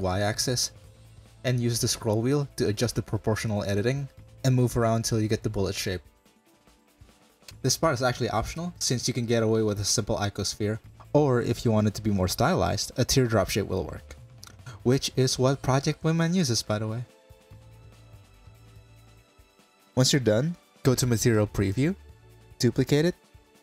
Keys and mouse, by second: 12.8 click, 13.2 click, 13.6 1, 14.0 click, 14.3 Tab, 14.6-15.0 drag, 15.2 drag, 15.5-16.5 middle drag, 16.5 drag, 17.5 click, 18.1 middle drag, 18.7 middle drag, 20.2 click, 21.3 shift+d, 22.2 click, 23.5 middle click.